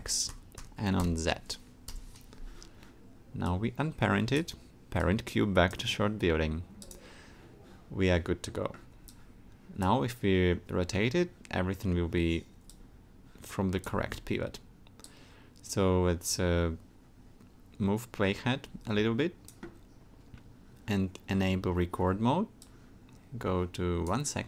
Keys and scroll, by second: 0.0 0, 0.3 Tab, 1.0 0, 1.9 Return, 14.0 super+z.